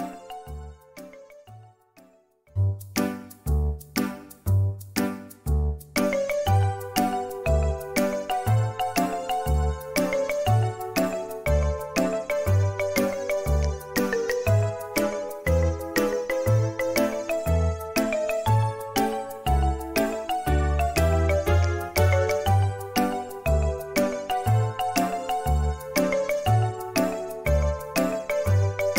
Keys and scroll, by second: 1.6 space, 3.6 r, 6.1 `, 11.4 Escape, 12.2 typing, 13.2 space, 16.0 Escape, 16.0 space, 16.0 r, 19.2 space, 21.8 c, 21.8 z, 23.8 r, 25.1 space, 27.0 Delete.